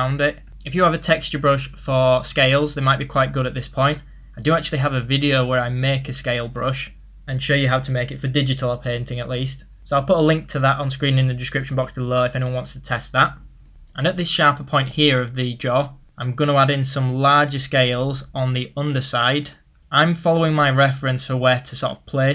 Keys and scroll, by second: 15.3 ctrl+z.